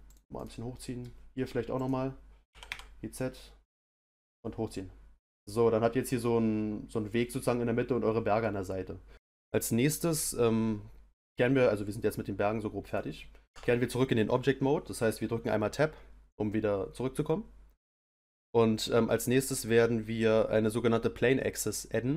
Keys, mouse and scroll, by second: 0.3 click, 0.7-1.7 middle drag, 1.7 click, 2.5 g, 4.3 click, 4.6-7.6 middle drag, 8.4 middle click, 12.8 click, 13.5 Tab.